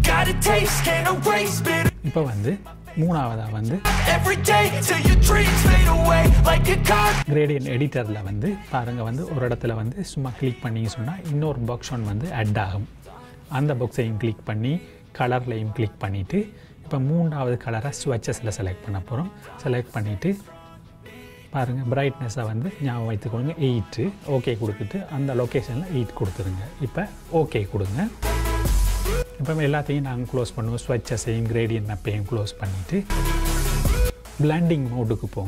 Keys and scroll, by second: 12.9 j, 25.8 KP_8.